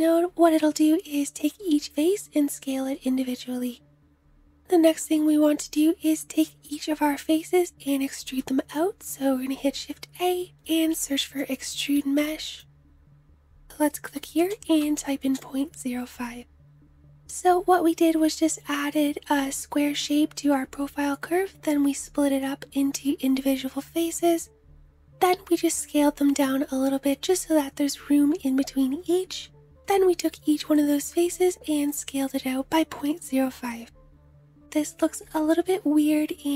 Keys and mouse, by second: 7.5 shift+a, 14.0-20.7 middle drag.